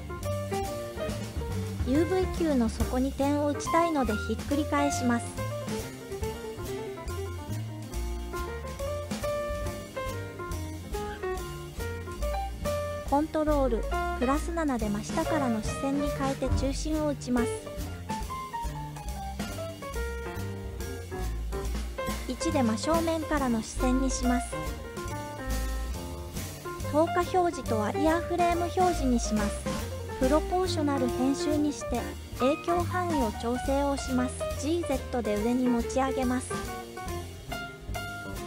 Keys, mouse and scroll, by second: 0.5 click, 1.9-3.9 middle drag, 6.2 click, 8.3 a, 13.1 click, 14.2-15.6 shift+middle drag, 17.3 ctrl+KP_7, 18.3-19.0 scroll up 4, 20.1 click, 21.5 KP_1, 22.5 shift+middle click, 23.4-23.7 scroll down 1, 24.1 shift+middle click, 24.1 scroll down 3, 25.9 click, 27.0 click, 28.5 click, 29.7 click, 31.2 g, 32.0 z, 34.4-35.0 scroll up 2, 35.0 scroll down 1, 37.9-38.2 scroll down 5.